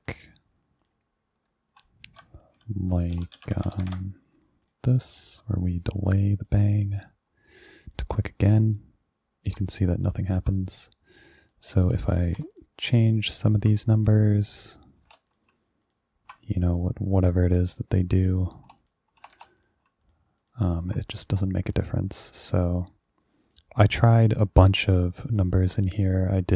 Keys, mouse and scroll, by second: 0.2 click, 0.9 click, 3.0-4.5 typing, 4.7 click, 5.6 click, 6.2 click, 7.2 click, 8.0 click, 8.8 ctrl+click, 9.8 click, 10.1 ctrl+click, 10.8 click, 11.2 click, 11.5 click, 11.9 click, 12.3 BackSpace, 12.5 1, 12.6 click, 13.3 ctrl+click, 14.0 click, 14.4 click, 15.1 BackSpace, 15.1 1, 15.4 click, 15.9 ctrl+click, 16.8 click, 17.2 click, 17.7 click, 18.5 click, 18.9 click, 19.3 BackSpace, 19.4 1, 19.7 click, 20.1 ctrl+click, 20.5 ctrl+click, 21.2 click, 21.9 click, 23.5 click, 24.3-25.5 drag, 26.0 click.